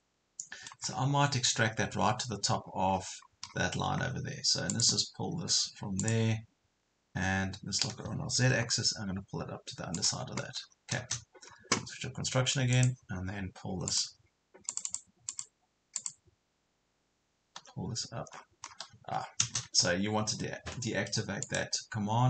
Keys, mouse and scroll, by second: 0.9 scroll up 1, 2.7 scroll down 1, 2.9 scroll up 1, 3.4 scroll down 1, 4.7 click, 6.9 scroll up 1, 8.5 Up, 10.0 click, 11.5-12.8 scroll down 1, 12.8 click, 13.4 scroll up 1, 13.9 click, 17.6 p, 18.4 scroll down 1, 19.0 Escape, 21.4 click.